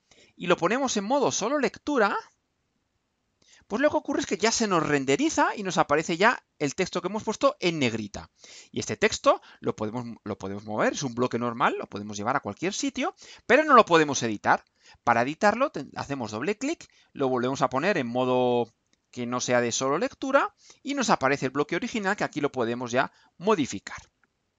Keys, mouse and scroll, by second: 2.1 click, 3.1 click, 8.8-10.2 drag, 10.7-12.9 drag, 16.0 click, 17.5 click, 20.3 click, 22.0 click.